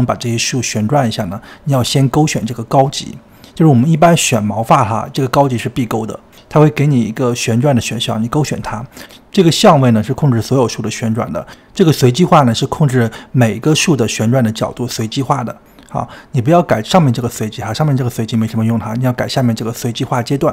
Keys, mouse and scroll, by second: 5.2-7.7 drag, 9.7-12.6 drag, 12.6-14.7 middle drag, 14.7-16.0 drag, 16.4 middle click, 16.9-20.5 drag.